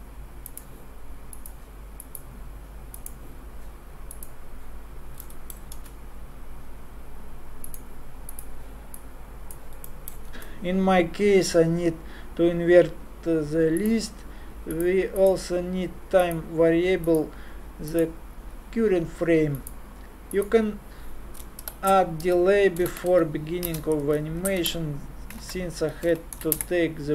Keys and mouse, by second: 5.7 shift+a, 9.0-10.3 drag, 10.3-12.0 middle drag, 10.3 shift+a, 15.2-17.1 drag, 22.1-25.4 drag, 25.4 f.